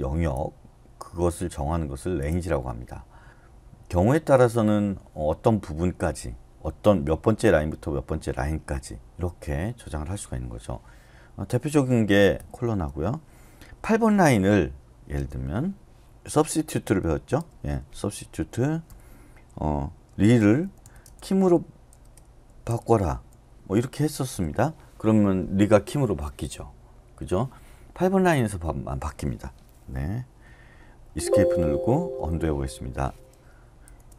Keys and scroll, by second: 12.4 Escape, 12.5 typing, 13.6-16.0 typing, 17.4 typing, 18.6-24.0 typing, 24.3 Return, 29.3 typing, 31.0 Escape, 32.2 typing, 33.8 typing.